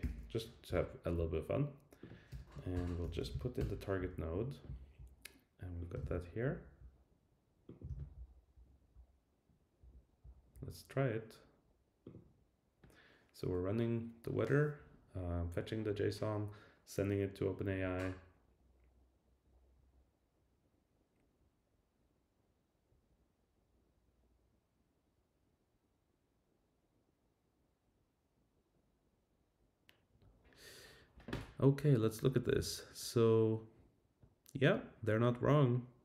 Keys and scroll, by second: 2.3 Return, 3.6 Return, 6.0 super+c, 7.8 super+v.